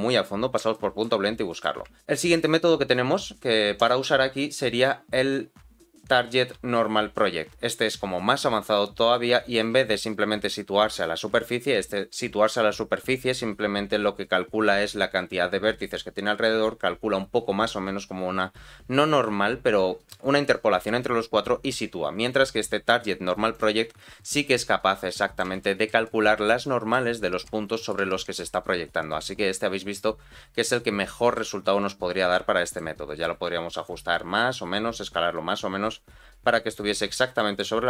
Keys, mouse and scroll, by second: 0.3-0.6 scroll up 1, 0.7 shift+middle click, 1.3 middle click, 3.7-23.6 drag, 24.5 middle click, 25.6 shift+middle click, 26.0 middle click, 27.1 scroll down 2, 27.4 middle click, 28.1 shift+middle click, 28.5-31.3 middle drag, 32.3 middle click, 33.0-33.4 scroll up 1, 33.8-36.7 shift+drag, 37.0-37.3 scroll down 2, 37.3 middle click.